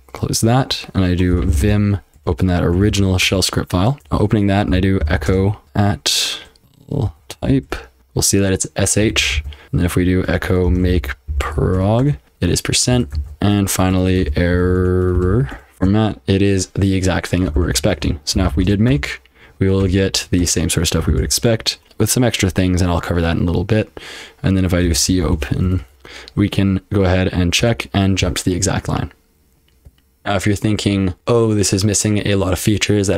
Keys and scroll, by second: 1.1-2.1 typing, 2.8 ctrl+f, 3.2 Return, 3.7-16.2 typing, 9.3 ctrl+p, 17.5-19.1 typing, 19.8 Return, 20.4 Return, 20.8-21.6 typing, 24.6-25.9 typing, 25.9 Return, 27.6 Return, 28.8-30.1 typing.